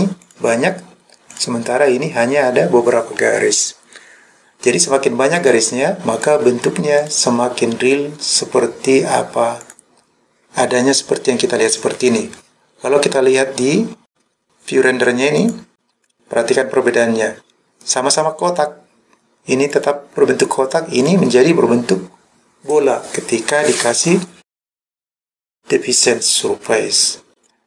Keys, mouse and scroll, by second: 0.3 click, 1.4 click, 5.4 click, 6.3 click, 7.1 click, 9.7 click, 15.4 click, 16.0 click, 19.7 click, 21.0 click, 27.4 click.